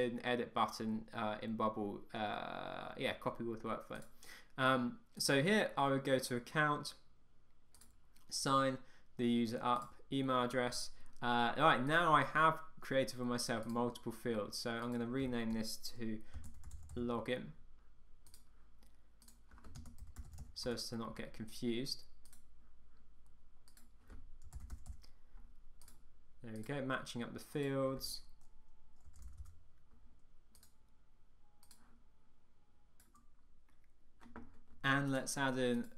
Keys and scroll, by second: 20.8 Return.